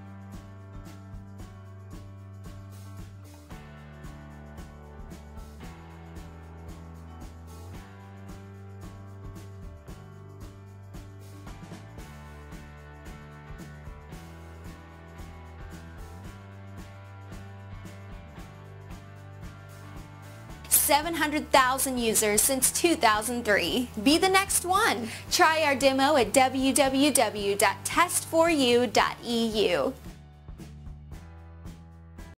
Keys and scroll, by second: 3.7 Tab, 7.2 Tab, 30.4 typing.